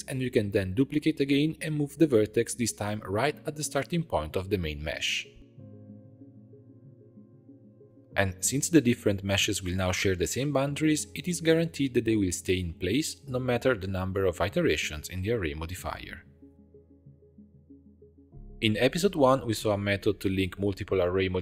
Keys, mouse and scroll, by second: 0.6 g, 2.8-3.9 shift+middle drag, 3.9 shift+d, 7.5 Tab, 8.1-8.6 shift+middle drag, 8.6 click, 10.1 click, 11.1 click, 13.7 click, 14.9 click, 16.9-18.1 drag, 20.0 right click, 20.7 click.